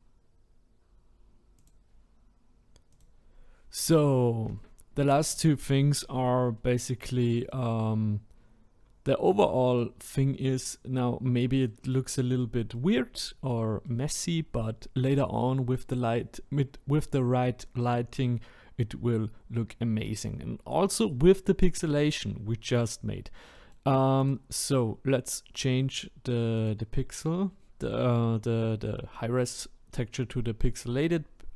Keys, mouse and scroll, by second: 0.0-3.0 middle drag, 6.7-8.4 middle drag, 8.4-9.0 scroll down 1, 9.0-9.5 scroll up 1, 9.5-10.0 middle drag, 10.0-10.5 scroll down 3, 10.5-11.2 middle drag, 11.2-11.6 scroll up 1, 11.6-12.2 middle drag, 12.2-12.7 scroll up 2, 12.7-24.3 middle drag, 24.3 Left, 29.0-29.9 middle drag, 29.9-30.5 scroll up 1, 30.5-31.5 scroll down 1.